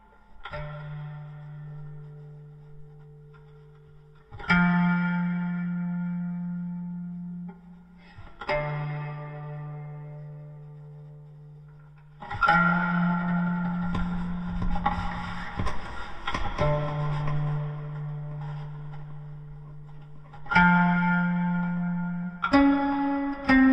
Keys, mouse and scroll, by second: 13.1 KP_5.